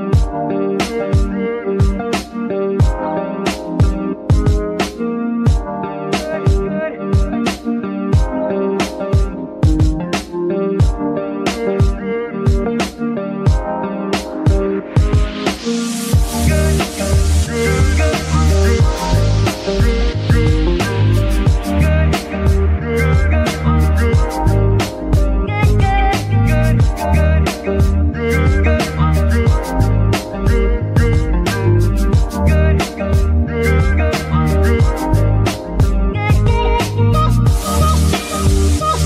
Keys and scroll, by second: 0.3 g, 1.7 s, 2.6 Tab, 3.0 s, 4.6 KP_3, 5.3 g, 17.0 typing, 17.2 Return, 25.2 KP_3, 26.3 g, 28.3 shift+g.